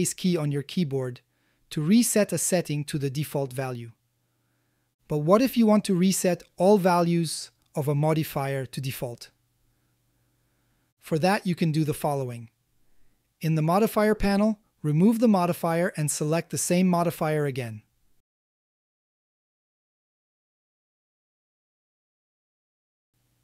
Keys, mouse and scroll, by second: 3.5 middle click, 4.5 middle click, 5.9-6.3 shift+middle drag, 6.6-7.6 middle drag, 16.8-19.5 drag, 20.7 a, 20.9 a, 21.5-22.9 middle drag.